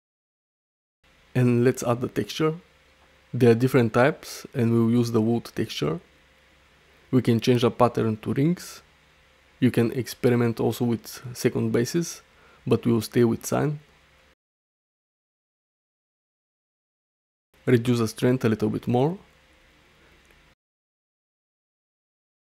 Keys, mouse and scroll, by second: 2.0-5.7 drag, 7.5-9.0 drag, 9.4 middle click, 9.9 shift+middle click, 10.7-11.9 drag, 12.3-13.5 middle drag, 13.7 ctrl+z, 14.9-16.0 middle drag, 16.8 click, 18.0-20.3 shift+drag, 20.9 middle drag, 21.5 shift+middle click, 21.8 middle click.